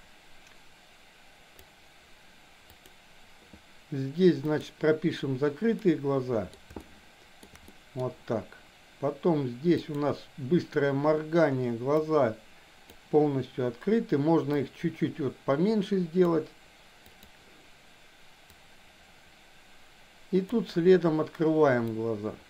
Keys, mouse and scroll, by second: 2.7 click, 5.8 middle click, 6.8 shift+middle click, 7.7 middle click, 9.8 click, 12.1 click, 14.6-16.3 drag, 17.1 click, 18.6-20.6 drag, 21.9-22.4 drag.